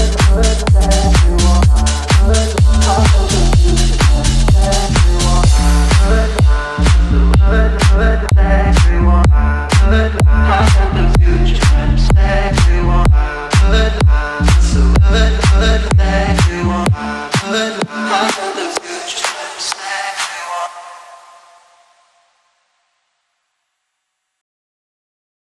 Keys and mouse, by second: 0.0 click, 0.1 space, 1.1 space, 1.6 click, 1.8-2.7 alt+drag, 24.8 click.